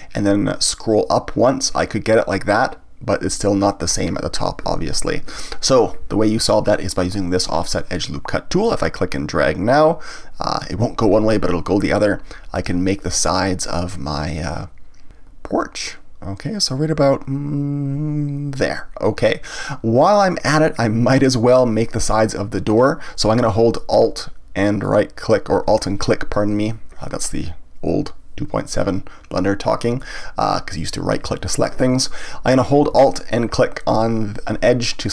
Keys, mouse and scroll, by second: 4.0 click, 5.1 ctrl+z, 9.4-12.4 drag, 24.8 alt+click, 30.0-34.5 middle drag.